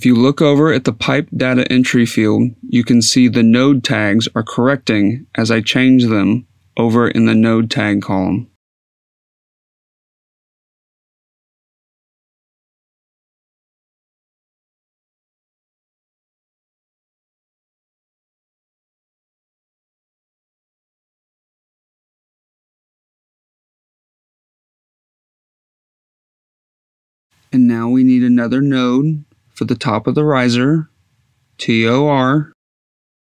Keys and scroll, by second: 0.0-3.4 typing, 1.2 Tab, 4.5-16.8 typing, 10.2 Down, 17.9-28.5 typing, 29.1 F2, 31.6 t, 32.3 r.